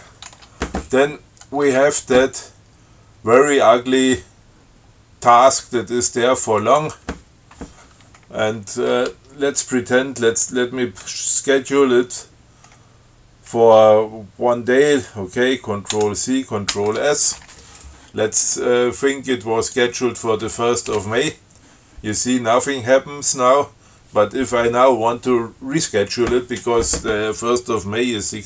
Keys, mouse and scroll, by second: 0.5 Tab, 2.0 Tab, 6.9 click, 16.2 ctrl+c, 17.0 ctrl+s, 19.9 click.